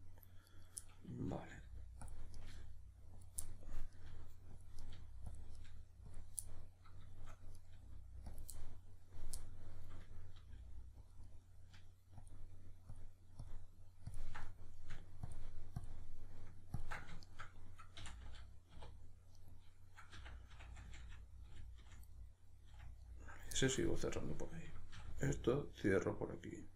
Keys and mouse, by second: 0.5 right click, 0.8-2.1 middle drag, 1.5 g, 2.1 click, 2.4 right click, 2.5 g, 3.2 click, 3.4 middle click, 4.0 right click, 4.1 g, 4.6 click, 4.8 right click, 4.9 g, 5.4 click, 5.6 right click, 5.6 g, 6.2 click, 6.4-7.6 middle drag, 7.6 right click, 7.8 g, 8.4 click, 8.6-11.2 middle drag, 10.4 g, 11.2 click, 11.2-12.2 middle drag, 12.2-14.4 ctrl+drag, 14.4-15.3 middle drag, 15.3-17.2 ctrl+drag, 17.2 shift+right click, 18.0 f, 19.4 right click, 20.2 f, 22.2-24.2 middle drag, 22.7 f, 24.2 right click, 25.0 f, 25.3-26.7 middle drag.